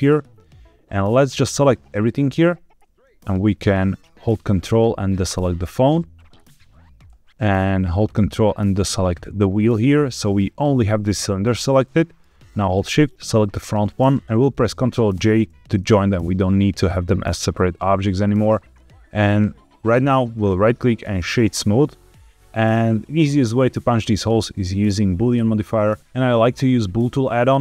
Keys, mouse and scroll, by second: 0.0 click, 1.1-1.9 drag, 4.6-5.2 ctrl+drag, 8.0-8.9 ctrl+drag, 9.6 middle click, 11.8 middle click, 13.1 shift+click, 15.1 ctrl+j, 15.6-16.0 middle drag, 18.2 middle click, 20.3-21.5 right drag.